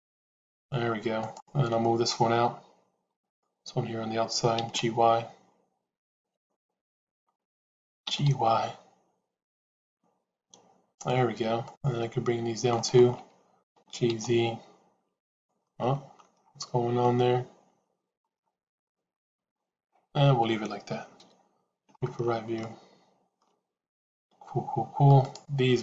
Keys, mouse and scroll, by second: 1.1 click, 4.4 g, 6.7 click, 7.9 g, 13.5 g, 15.5 middle click, 16.9-18.1 middle drag, 18.8 shift+middle click, 21.1 KP_3, 22.5 shift+middle click, 25.1 click.